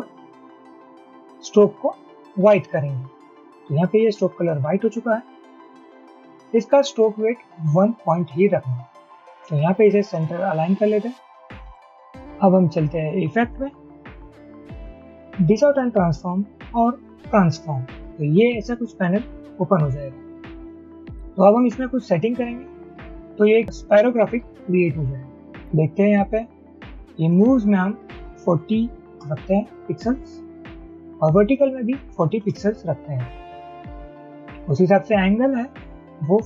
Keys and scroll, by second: 28.6-29.2 typing, 30.3 Tab, 31.1 typing, 32.3 typing, 32.8 Tab, 33.6 typing, 36.3-36.4 typing.